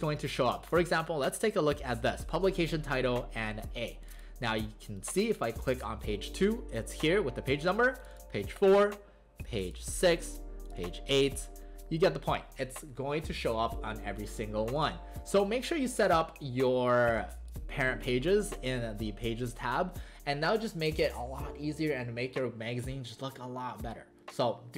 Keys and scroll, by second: 0.3 alt+space, 17.2 alt+space.